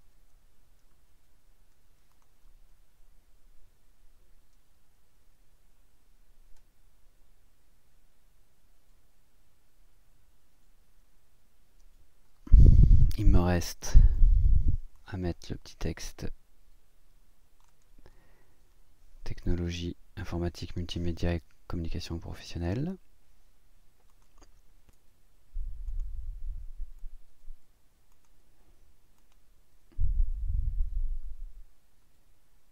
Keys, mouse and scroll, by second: 2.1 click, 4.2 Down, 8.0 Up, 14.1 click, 14.9-17.8 drag, 24.1 click, 24.9 click, 24.9 l, 25.9 click, 27.1 scroll down 1, 28.1 click, 29.2 click, 31.6 scroll up 1.